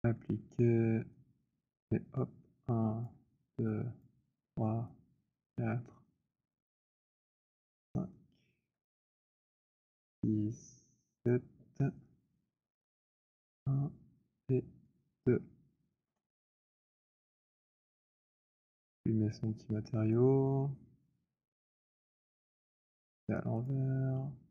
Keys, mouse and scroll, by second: 1.6 click, 3.0 click, 4.1 click, 5.3 click, 6.8 alt+click, 7.5 alt+click, 8.6 alt+click, 9.9 click, 11.2 click, 12.5 Return, 13.3 click, 14.8 click, 16.0 Return, 17.1 w, 17.9 click, 21.2 right click, 23.2 click.